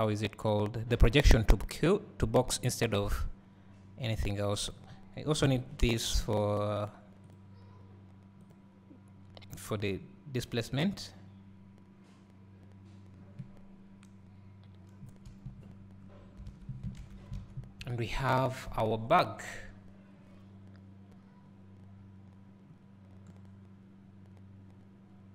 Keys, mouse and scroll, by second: 4.7 click, 10.0-25.3 drag, 11.8-14.6 scroll down 1, 15.0 KP_0, 17.8-18.3 scroll down 1, 18.3 scroll up 1, 19.2 scroll down 1.